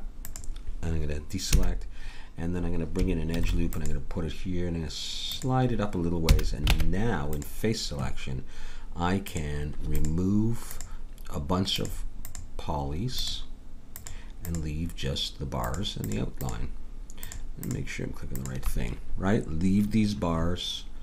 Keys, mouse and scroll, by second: 1.5 a, 3.3 ctrl+r, 6.2 a, 6.7 ctrl+Tab, 9.2 click, 9.8-21.0 drag.